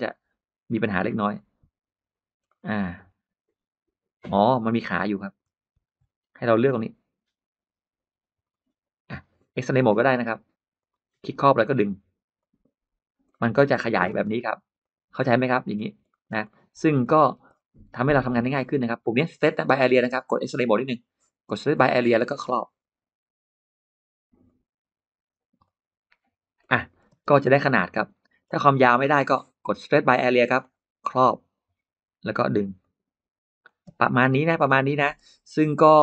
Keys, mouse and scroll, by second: 0.6 click, 1.2 click, 2.2-2.6 scroll up 1, 2.3-5.2 middle drag, 5.6 ctrl+z, 6.3-8.2 drag, 10.6 click, 11.6 click, 12.2 click, 13.1 middle click, 13.5 scroll down 1, 14.0 space, 14.7 click, 15.1 middle click, 15.5-16.4 scroll up 4, 15.9 middle click, 16.3 middle click, 16.9 middle click, 17.0-17.6 scroll down 2, 17.7 middle click, 20.7 click, 21.6 click, 22.4-23.5 drag, 24.3 click, 25.5 click, 26.5 middle click, 26.5 scroll up 1, 26.7-27.1 scroll down 1, 27.0 space, 27.3 scroll up 1, 27.5 middle click, 27.6 space, 28.2 scroll down 1, 28.5-28.8 scroll up 1, 28.8 middle click, 29.7 click, 30.4 click, 32.1 click, 32.6 click, 33.8 space, 33.9 middle click, 34.2 scroll down 1, 34.4 middle click, 35.0-35.3 scroll down 1, 35.9 click.